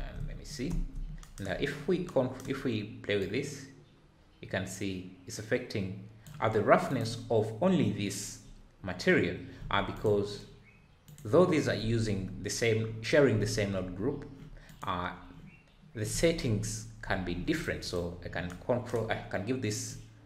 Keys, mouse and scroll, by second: 0.7 space, 2.0 scroll up 8, 3.3-7.0 drag, 10.0 click, 11.2 click, 14.8 click, 17.8 click, 20.0-20.2 drag.